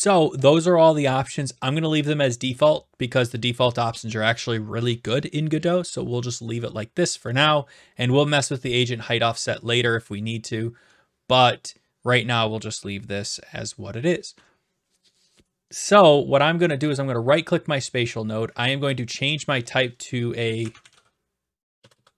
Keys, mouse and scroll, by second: 17.0 right click, 19.0 click, 19.9 click, 20.3-22.1 typing.